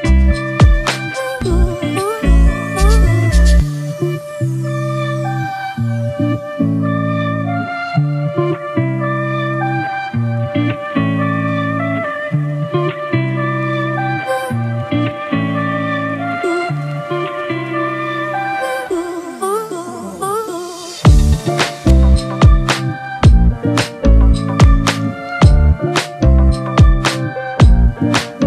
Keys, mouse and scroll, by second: 3.0 [, 3.1 [, 3.2 [, 7.3-11.2 typing, 16.6 typing, 23.9 double click, 24.9-27.8 typing.